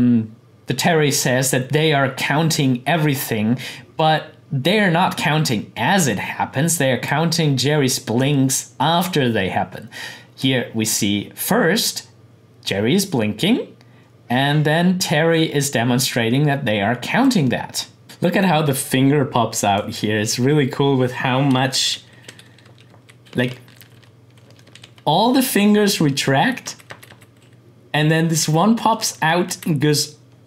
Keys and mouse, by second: 9.1-18.0 drag, 21.6 Right, 23.2 Left, 26.3 Right, 28.8 Left, 29.5 Right.